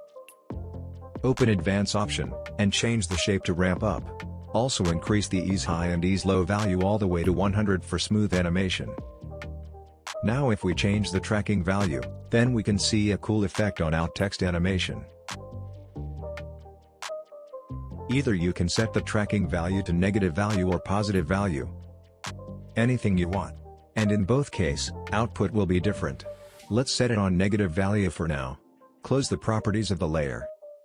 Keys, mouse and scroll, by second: 2.0-2.6 scroll down 1, 2.6-5.2 drag, 17.9 space, 19.2-20.1 drag, 26.2 ctrl+z, 29.1-30.8 drag.